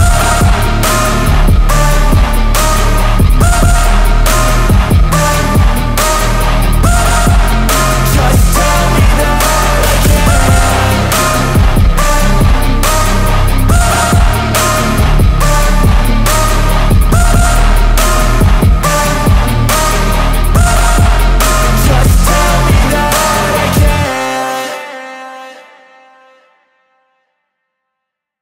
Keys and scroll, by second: 0.0 ctrl+z, 8.5 g, 12.4 space, 17.7 g, 21.7 space, 21.9 Escape, 22.4 F4, 23.1 F3, 23.4 Escape, 25.6 shift+F2, 26.7 F9.